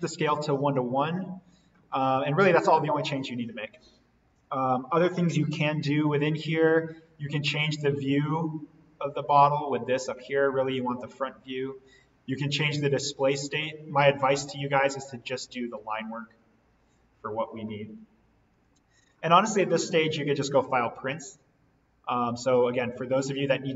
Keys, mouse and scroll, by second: 2.6 click, 4.3 alt+v, 5.1 click, 8.1-13.5 drag, 18.5 click.